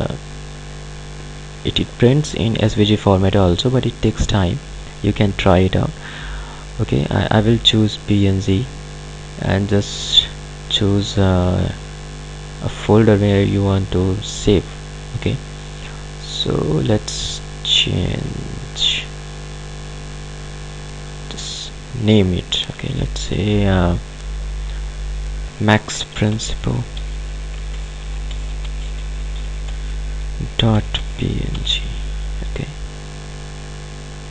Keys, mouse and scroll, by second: 8.0 click, 17.1 click, 19.9 click, 26.2-32.2 typing, 33.9 click.